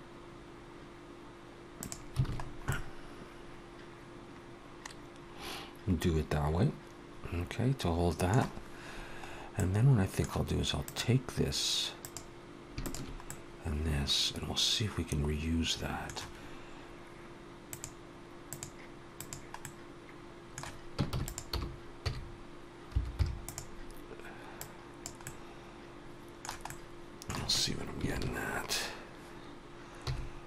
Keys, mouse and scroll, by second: 2.1 alt+a, 2.2-2.9 scroll down 4, 2.5 middle click, 9.1-9.4 scroll up 1, 9.4 middle click, 10.7 click, 11.8 click, 12.7 shift+click, 13.1 middle click, 17.5 click, 19.5 middle click, 20.9 shift+d, 21.4 r, 24.9 click, 25.1 middle click, 26.5 middle click, 28.0 ctrl+KP_7, 29.9 g.